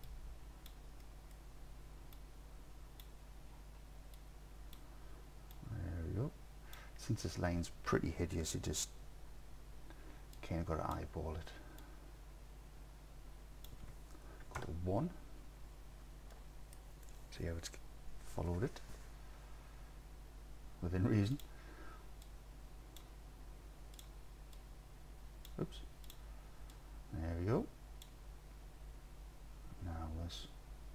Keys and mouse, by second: 0.1-0.7 drag, 1.1 click, 2.3 click, 4.2 click, 5.6 click, 10.4 click, 11.8-13.7 drag, 14.6 KP_1, 16.3 click, 16.4-16.8 drag, 22.3-23.0 drag, 24.7 click, 26.8-28.1 drag.